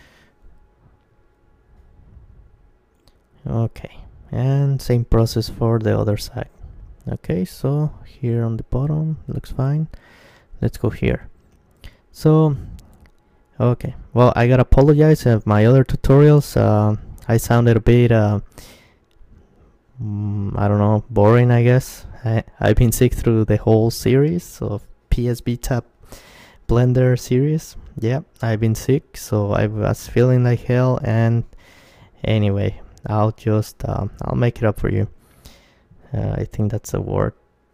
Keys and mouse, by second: 1.2-3.0 drag, 2.1 g, 4.4-6.3 drag, 5.8 Tab, 6.3 middle click, 9.3 middle click, 10.3 Tab, 12.3-15.0 middle drag, 15.0 g, 17.2-19.0 drag, 19.0-20.3 middle drag, 20.3 right click, 20.5 KP_Decimal, 20.9 click, 21.8 g, 23.1-25.1 drag, 26.3-28.7 right drag, 27.6 g, 28.5-31.0 drag, 31.0-33.6 right drag, 33.6-35.3 drag, 33.6 g, 35.3-37.0 middle drag, 36.0 g.